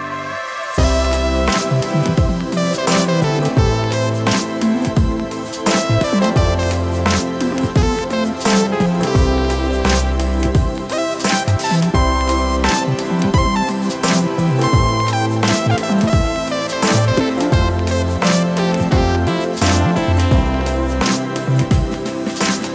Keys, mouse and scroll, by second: 0.9-1.4 middle drag, 1.8-3.0 ctrl+middle drag, 3.8 shift+middle click, 4.4 Tab, 4.8 ctrl+r, 8.1 shift+e, 9.5 middle click, 10.5 middle click, 11.7 shift+middle click, 12.5 ctrl+middle click, 13.8 ctrl+r, 15.5 click, 16.0 s, 19.0 alt+click, 19.9 s, 21.6 e.